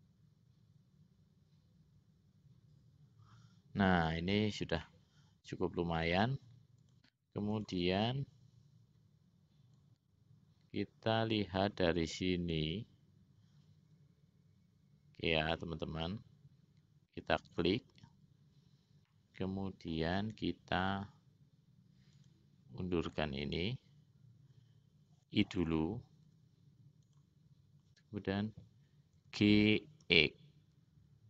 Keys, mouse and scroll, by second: 5.0-6.4 middle drag, 7.1 click, 7.7 click, 10.1-18.0 drag, 19.3 middle click, 22.3-23.3 drag, 26.4 i, 29.4 g.